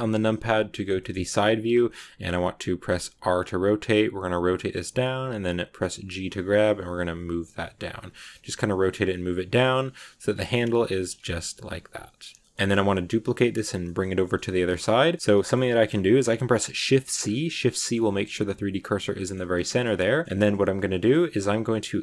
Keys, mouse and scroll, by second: 0.9 shift+middle click, 1.1-2.8 scroll up 2, 2.8 r, 8.5-10.0 middle drag, 10.0 g, 11.1 Tab, 11.1 scroll down 1, 11.1 scroll up 1, 11.2-14.0 middle drag, 14.0 scroll down 1, 14.1-16.2 shift+middle drag, 16.2 shift+c, 16.8 shift+middle click, 17.0 shift+scroll up 3, 17.5-20.2 shift+middle drag, 20.2-21.9 scroll up 1, 21.9-22.0 drag.